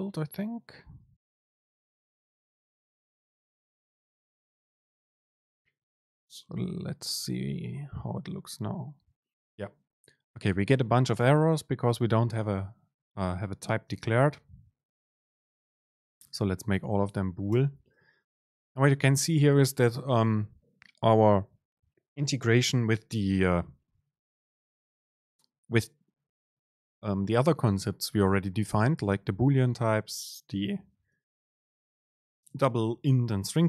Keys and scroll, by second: 14.0 super+space, 16.4 Down, 17.0 Down, 17.0 super+space, 17.8 Down, 18.2 super+space.